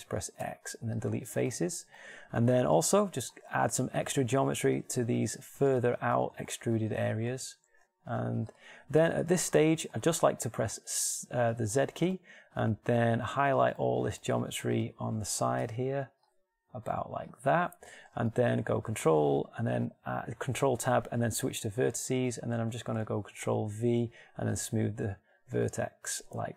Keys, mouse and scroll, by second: 0.8 x, 5.0 ctrl+r, 8.1 ctrl+r, 11.4 z, 16.1 b, 16.5-17.8 drag, 18.4-20.7 middle drag, 19.1 ctrl+Tab, 24.2 ctrl+v.